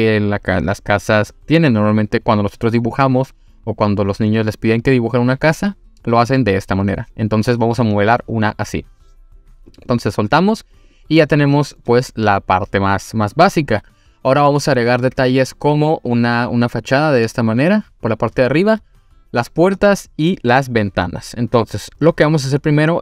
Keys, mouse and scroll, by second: 9.7 click, 9.8 click, 10.9 click, 11.5 scroll down 1, 11.8-14.5 middle drag.